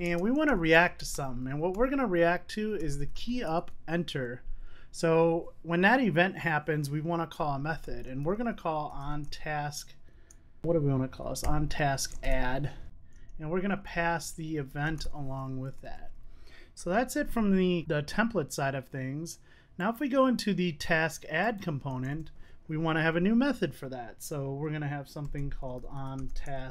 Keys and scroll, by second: 1.6 Tab, 16.6 super+s.